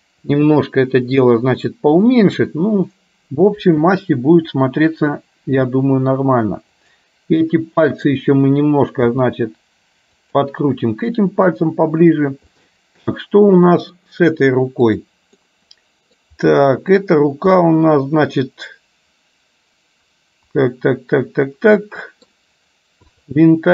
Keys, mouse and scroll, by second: 5.5 r, 8.0 click, 9.1 r, 12.6-14.1 middle drag, 14.9 click, 15.5 middle click, 17.7-22.4 middle drag, 23.1 click.